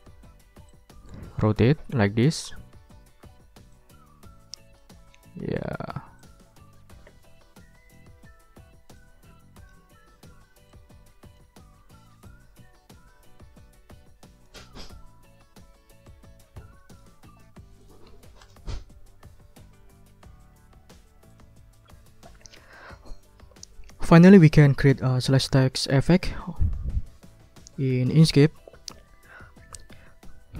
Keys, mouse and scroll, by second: 0.7-2.6 drag, 3.7-5.0 drag, 6.2-8.1 drag, 9.0 click, 10.7 click, 12.3-14.6 drag, 16.1-17.2 drag, 17.8 click, 18.4 click, 18.9-19.5 ctrl+scroll up 3, 19.9 ctrl+click, 20.0 ctrl+scroll up 1, 20.1-20.7 ctrl+scroll down 4, 20.9 ctrl+scroll up 2, 21.3 ctrl+click.